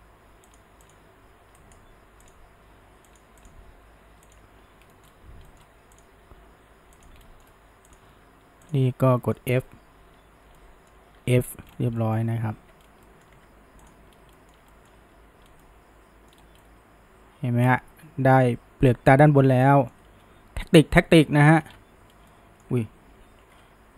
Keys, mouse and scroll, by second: 0.9 click, 1.1 g, 2.3 click, 2.4 g, 3.4 click, 3.6 g, 4.9 shift+middle click, 5.1-5.5 scroll, 5.5-6.0 middle drag, 6.0 click, 6.3 g, 7.3-7.9 shift+middle drag, 7.9 click, 9.1-10.0 shift+middle drag, 10.0 f, 10.6-11.2 shift+middle drag, 11.2 f, 11.7-12.0 scroll down 1, 12.0-12.5 shift+middle drag, 12.5 alt+a, 12.8 scroll down 2, 13.1 middle click, 13.4 Tab, 13.9 click, 14.1 scroll down 1, 14.4-15.1 shift+middle drag, 15.1 h, 15.5 scroll down 1, 15.6-16.4 middle drag, 16.4 scroll up 1, 16.6-19.6 middle drag, 21.7 alt+h, 22.1 scroll down 1, 22.3-23.2 middle drag, 23.2 ctrl+z.